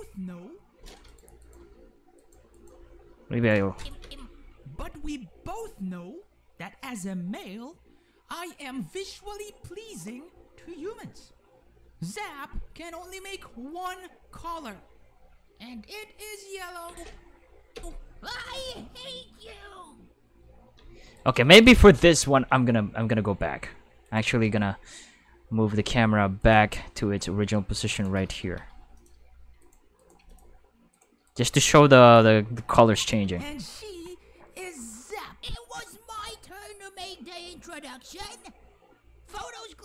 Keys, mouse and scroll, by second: 0.7 space, 1.0 right click, 1.4 right click, 1.6 g, 2.2 right click, 2.5 right click, 2.7 g, 3.4 click, 3.8 click, 4.0 space, 16.8 space, 17.7 space, 20.8 space, 21.1 right click, 21.4 shift+s, 22.3 g, 24.0 right click, 24.4 g, 26.4 right click, 27.9 right click, 28.4 shift+d, 28.9 click, 29.6 right click, 30.0 right click, 30.2 x, 30.3 click, 30.9 right click, 31.3 right click, 31.5 shift+5, 32.0 click, 33.0 click, 33.2 space.